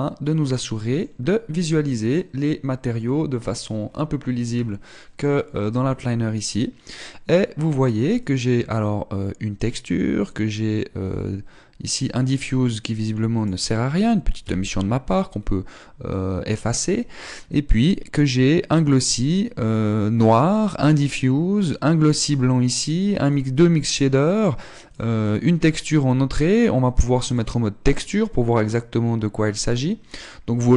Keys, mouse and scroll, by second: 0.3 middle click, 3.7 scroll down 1, 4.7-5.9 scroll up 1, 8.8 click, 10.8 click, 13.4 click, 14.9 x, 15.9-16.5 scroll up 1, 16.7 middle click, 18.2 click, 19.5 click, 22.2 click, 23.7 click, 24.4 click, 25.3-28.0 click, 29.1-30.1 scroll up 1, 30.1 middle click.